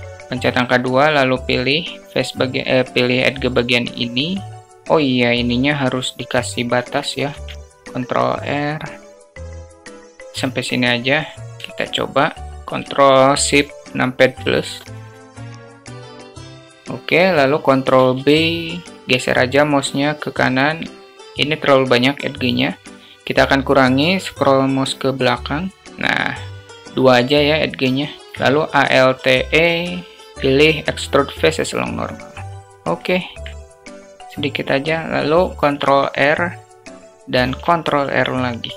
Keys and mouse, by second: 0.2 2, 7.2 ctrl+r, 11.6 shift+click, 14.4 ctrl+shift+n, 17.8 ctrl+b, 30.1 alt+e, 30.3 alt+e, 32.7 alt+middle click, 33.2 click, 35.5 ctrl+r, 35.7 ctrl+r.